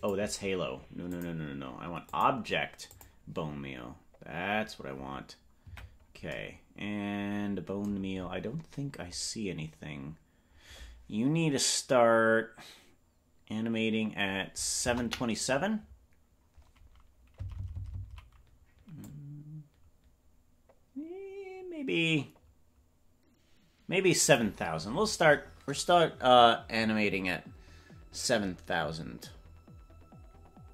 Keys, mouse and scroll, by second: 2.0 click, 5.6 KP_Decimal, 14.8 KP_0, 17.7 Left, 19.1 Left, 19.1-24.5 drag.